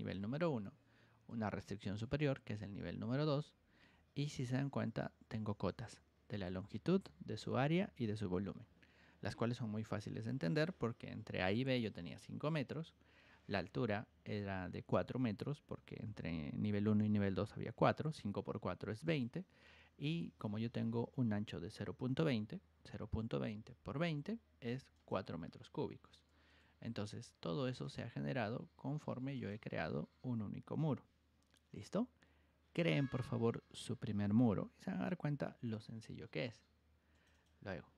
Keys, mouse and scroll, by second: 0.1 g, 1.2 ctrl+click, 5.2-6.4 ctrl+drag, 12.1 click, 19.0 click, 24.9 click, 26.5 Escape, 27.8 click, 29.3 click, 37.1 click, 37.3 click.